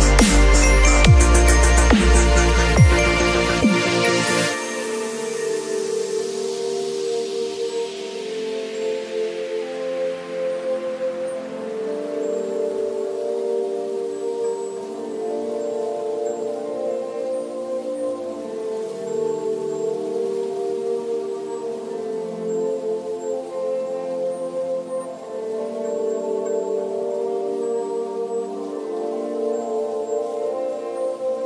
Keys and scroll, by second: 3.6 b, 6.8 [, 17.9 ], 20.0 [, 22.6 v.